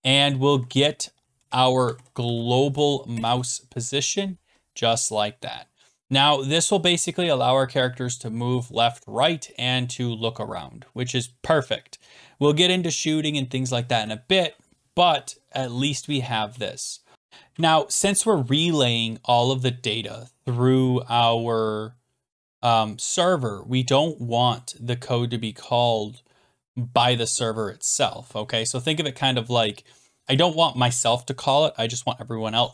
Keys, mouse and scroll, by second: 0.2-4.5 typing, 3.1 Return, 5.2 click, 16.0 Return, 16.4 BackSpace, 17.1-22.1 drag, 30.4-32.7 drag.